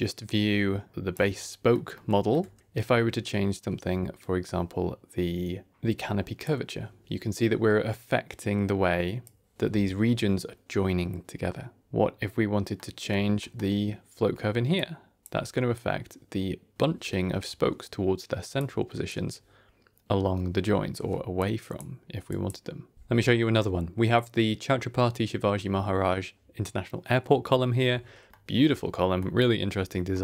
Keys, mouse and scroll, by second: 0.9 click, 1.3 shift+middle click, 1.8 ctrl+middle click, 2.3 ctrl+scroll down 1, 2.4 scroll up 1, 2.6-3.0 scroll down 1, 5.7 click, 9.1 click, 11.8 click, 12.7 middle click, 13.3 middle click, 14.6 click, 18.5 click, 21.3 click, 22.8 click, 23.1 click, 23.2 t, 28.2-29.2 middle drag, 29.2-29.9 scroll down 3, 30.0 middle click.